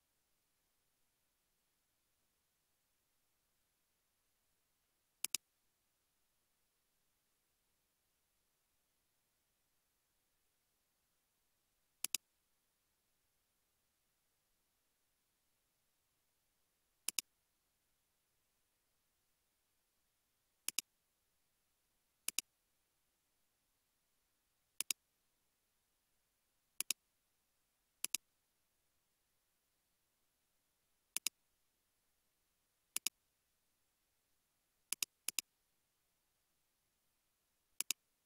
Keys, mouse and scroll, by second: 3.6 |, 6.0 a, 13.1 scroll up 1, 14.9-15.8 scroll down 1, 15.5-16.3 typing, 18.8 typing, 25.6 typing, 26.8 ctrl+click, 29.5 typing, 31.2 ctrl+click, 33.6 typing, 35.3 double click, 35.9 typing.